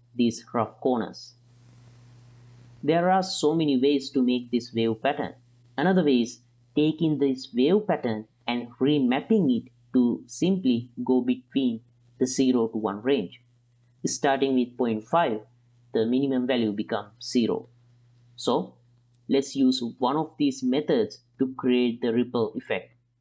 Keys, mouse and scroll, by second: 3.2-4.1 middle drag, 5.1 middle click, 5.8 middle click, 7.0 middle drag, 8.1 ctrl+z, 8.2 click, 8.7 middle click, 9.2 click, 10.3 click, 10.7 click, 12.7-14.5 drag, 15.1 middle click, 16.5 click, 16.9 click, 17.7 click, 21.1 middle drag, 21.8 middle click, 22.5 middle click, 23.0 middle click.